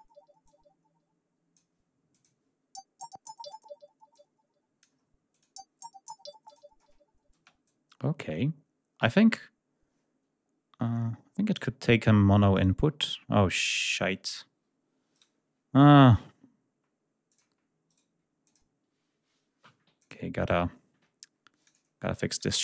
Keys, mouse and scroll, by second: 0.3-1.6 drag, 1.9 click, 3.9 click, 5.1 click, 6.3 click, 10.3-11.6 drag, 12.4 right click, 13.7 click, 15.0 right click, 17.1 click, 17.7 right click, 18.3 click, 19.8 click, 21.5 click, 22.2 click.